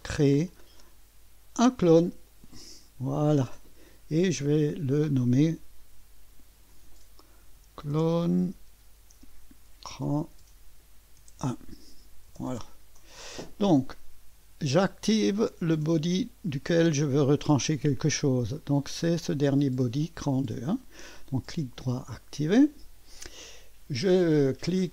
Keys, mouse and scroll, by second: 0.0 click, 2.3 click, 4.7 click, 6.2 F2, 7.2-11.3 typing, 12.3 Return, 16.1 click, 21.3 right click, 21.9 click, 22.1 right click.